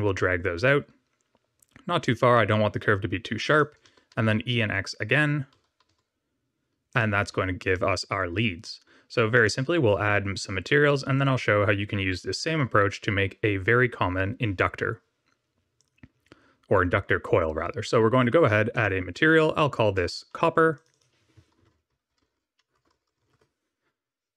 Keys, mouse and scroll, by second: 3.8 w, 4.1 x, 5.6 e, 7.3 Tab, 7.7 middle click, 9.3 click, 15.7 click, 18.7 click, 20.7 click, 20.8 click, 22.0 o, 22.7 BackSpace, 23.0 p.